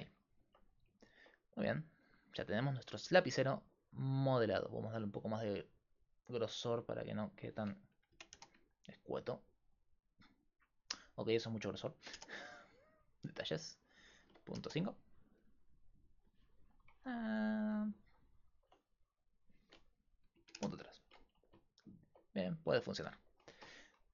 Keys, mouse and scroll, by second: 5.1-7.2 right drag, 7.2-9.1 drag, 12.1-16.6 drag, 19.3-21.3 drag, 21.3 right click.